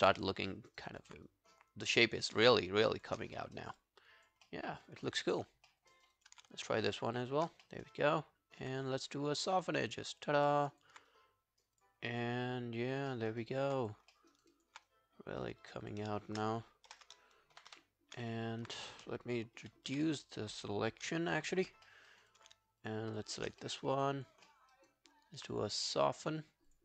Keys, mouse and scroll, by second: 0.5 alt+middle click, 0.7 alt+right click, 0.9 alt+click, 1.3 right click, 3.0 shift+click, 3.4 alt+middle click, 3.6 alt+right click, 3.8 alt+click, 4.5 alt+middle click, 4.7 alt+right click, 4.9 alt+click, 5.7 alt+middle click, 5.9 alt+right click, 6.2 alt+click, 7.1 shift+click, 7.7 alt+middle click, 7.9 alt+right click, 8.1 alt+click, 10.2 double click, 10.5 scroll down 2, 10.7 alt+click, 11.1 right click, 12.1 scroll down 1, 12.2 alt+click, 13.1 alt+middle click, 13.3 alt+right click, 13.5 alt+click, 14.1 alt+middle click, 14.3 alt+right click, 14.5 alt+click, 14.9 right click, 15.9 double click, 16.9 ctrl+F11, 17.6 shift+., 17.7 shift+., 19.6 shift+,, 19.9 shift+,, 21.9 alt+middle click, 22.1 alt+right click, 22.3 alt+click, 23.1 shift+click, 23.6 alt+middle click, 23.8 alt+right click, 24.1 alt+click, 24.5 alt+middle click, 24.8 alt+right click.